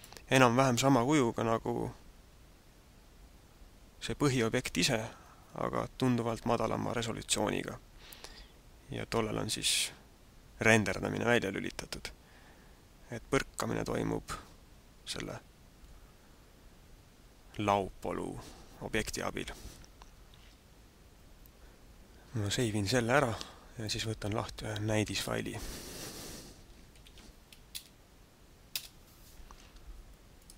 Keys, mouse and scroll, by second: 0.0 right click, 22.6 click, 29.2 Return, 30.4 click.